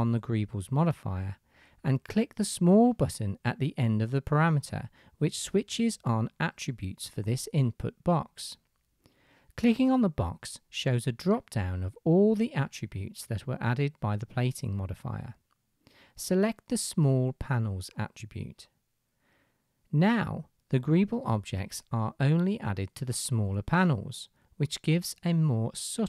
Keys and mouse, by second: 18.1-20.6 middle drag, 23.2-24.1 middle drag, 24.9-26.0 drag.